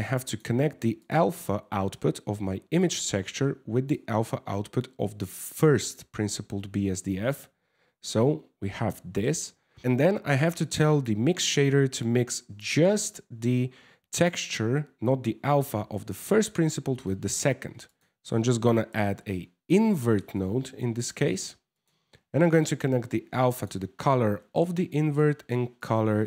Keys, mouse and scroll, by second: 0.6 click, 2.5 click, 3.6 click, 6.7 middle click, 7.3 Tab, 8.5 middle click, 15.8 middle click, 16.6 middle click, 17.2 shift+a.